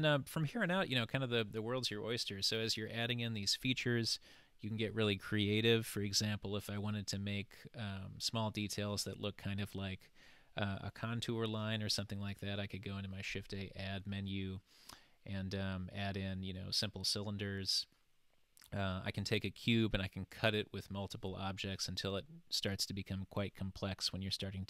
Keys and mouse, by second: 12.5 shift+a.